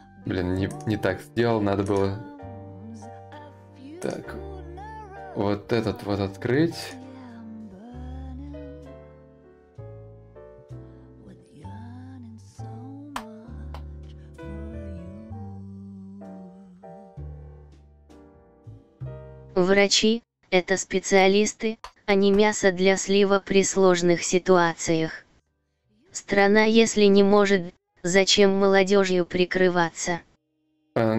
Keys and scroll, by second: 10.3 ctrl+u, 12.5 ctrl+shift+u, 13.5 ctrl+l, 21.3 ctrl+a, 21.7 ctrl+c.